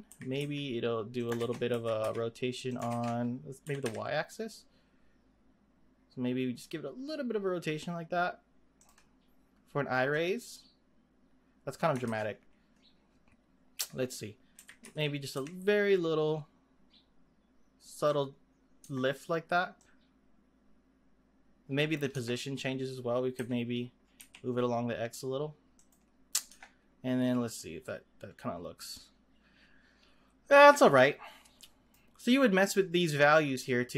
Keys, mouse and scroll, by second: 0.1 r, 1.3 ctrl+z, 1.7 r, 2.8 ctrl+z, 3.6 r, 10.1-12.0 drag, 12.0 ctrl+z, 13.8 click, 14.6 r, 18.8 Tab, 19.8-22.1 drag, 22.1 Tab, 23.4 g, 26.5 Tab, 27.6-30.6 drag, 32.6-33.9 drag.